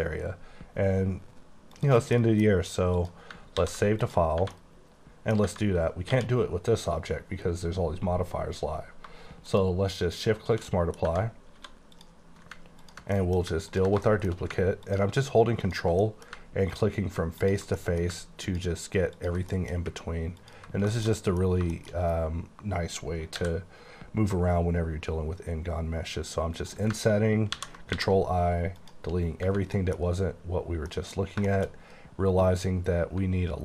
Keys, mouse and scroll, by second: 1.8 click, 2.1 middle click, 2.9 click, 3.5 ctrl+s, 4.1 click, 4.4 Tab, 4.5 middle click, 5.5 Tab, 6.1 q, 9.4 click, 10.7 middle click, 11.1 Tab, 11.4 scroll up 2, 11.6 3, 12.0 click, 13.2 middle click, 13.4 scroll down 1, 13.7 click, 14.1 middle click, 14.9 click, 15.7 click, 16.1 middle click, 16.7 ctrl+click, 17.5 ctrl+click, 17.8 middle click, 18.4 ctrl+click, 19.1 ctrl+click, 19.6 middle click, 20.4 ctrl+click, 21.0 shift+middle click, 21.5-22.3 scroll up 4, 21.9 shift+middle click, 23.3 |, 26.6 click, 27.6 i, 27.9 x, 28.8 click, 29.2 scroll down 4, 29.5 Tab, 29.8 middle click, 30.3-30.9 scroll up 3, 30.9 middle click, 31.3 scroll down 2, 31.5 shift+middle click, 32.1 scroll up 2, 32.6 scroll down 1, 33.0 Tab.